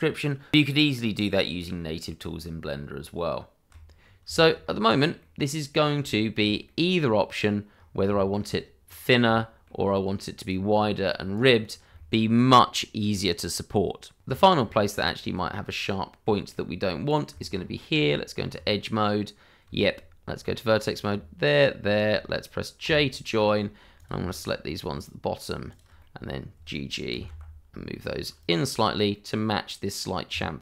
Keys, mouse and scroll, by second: 4.0 scroll down 1, 4.3 shift+middle click, 4.6-5.2 scroll up 1, 5.2 middle click, 5.7-6.0 scroll down 1, 6.6 middle click, 7.7 scroll up 1, 8.1 shift+middle click, 8.8 click, 9.3 shift+middle click, 9.8-10.2 scroll up 1, 10.4 click, 10.8 shift+middle click, 11.3 click, 11.5 scroll down 1, 11.9 shift+middle click, 14.2 scroll up 1, 14.9 scroll up 1, 15.6-15.9 scroll up 1, 15.9 middle click, 17.5 click, 17.7 middle click, 17.9-18.2 scroll up 1, 18.2 Tab, 21.5 shift+click, 22.8 j, 23.9 click, 26.2 middle click, 27.1 g, 28.4 click, 28.6-29.1 scroll down 1, 29.1 middle click, 30.3 Tab.